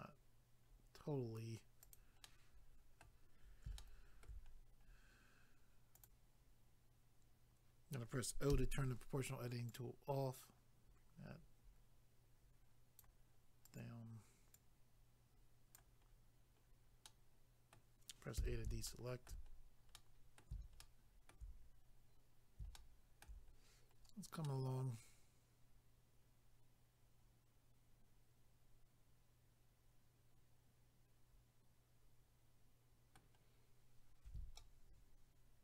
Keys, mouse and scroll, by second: 0.1 scroll up 1, 1.8 click, 1.9 click, 2.2 middle click, 3.7 shift+middle click, 4.5 scroll up 1, 6.0 click, 6.1 click, 9.7 click, 13.7 click, 13.8 click, 16.1-16.9 scroll down 1, 17.1 middle click, 18.4 a, 18.9 shift+middle click, 19.5-19.9 scroll down 1, 19.9 middle click, 20.8 shift+middle click, 21.7 scroll up 1, 22.7 shift+middle click, 23.5 scroll up 1, 24.4 middle click, 34.5 shift+middle click.